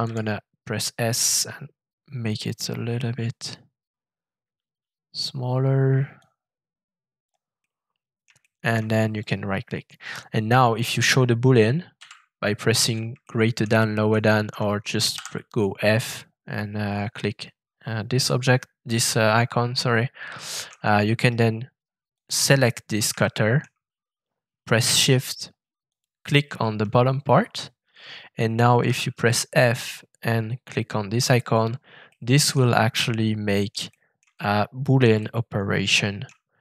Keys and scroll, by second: 0.0 shift+s, 11.9 <, 15.1 shift+f, 28.8 shift+f.